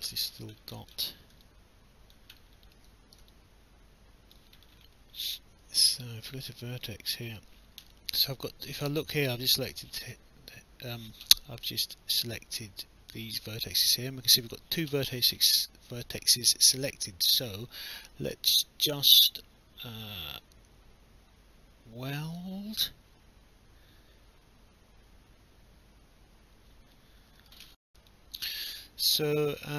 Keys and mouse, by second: 1.4 alt+click, 2.4 alt+middle click, 3.3 alt+click, 5.3 right click, 6.9 click, 16.1 click, 27.6 alt+F9, 28.1 alt+click.